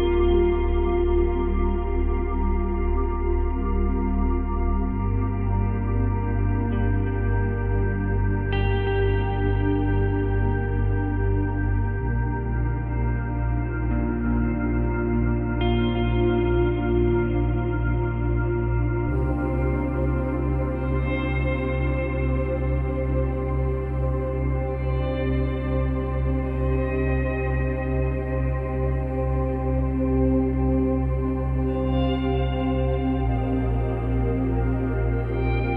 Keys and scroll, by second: 17.6 ctrl+z.